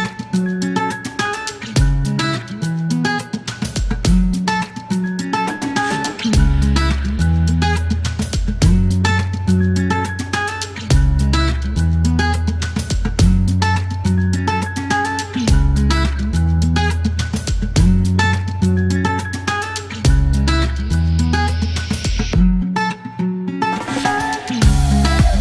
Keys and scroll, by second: 1.2 KP_0, 3.1 alt+m, 4.9 KP_0, 5.0 Return, 5.8 alt+q, 10.1 alt+m, 10.2 alt+s, 11.7-13.7 typing, 11.9 Return, 13.8 Return, 15.1-16.3 typing, 17.9 alt+m, 18.0 typing, 19.8 KP_Subtract, 19.9 KP_Decimal, 20.0 KP_3, 20.1 Return, 21.7 alt+u, 21.8 alt+m, 23.8 alt+e.